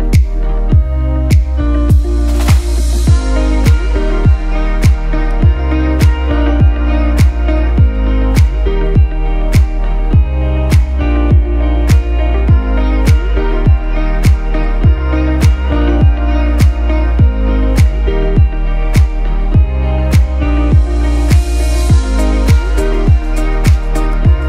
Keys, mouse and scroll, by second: 2.9 shift+Left, 4.8 shift+click, 6.0 right click, 7.7 click, 8.6 right click, 10.8 click, 15.9 click, 16.3 right click, 17.4 click, 24.0 shift+Up.